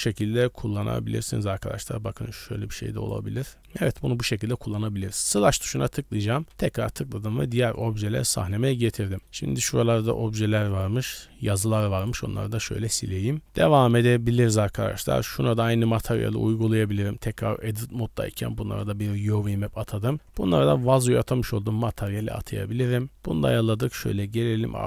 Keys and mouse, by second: 0.4-3.1 drag, 3.4 middle click, 5.1 KP_Divide, 6.4 middle drag, 6.4 KP_Divide, 7.3 middle drag, 7.8 shift+middle drag, 8.2 middle click, 8.7 shift+middle click, 9.0 shift+middle click, 9.4-9.8 middle drag, 10.0 d, 10.1-12.1 drag, 12.1 d, 12.4 middle click, 12.9 shift+middle click, 13.9 middle click, 14.1 drag, 14.9 click, 15.0-16.1 middle drag, 16.4 shift+middle drag, 16.9 Tab, 17.3 a, 18.4 u, 19.5 Tab, 20.1 click, 21.5 Tab, 22.9-23.2 drag, 23.8-24.5 drag, 24.7 middle click.